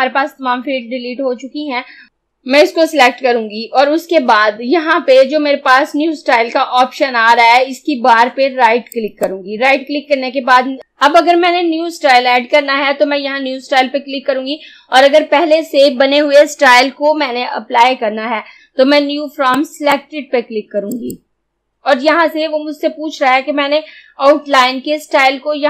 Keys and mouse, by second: 3.3 click, 9.1 right click, 19.6-20.9 drag.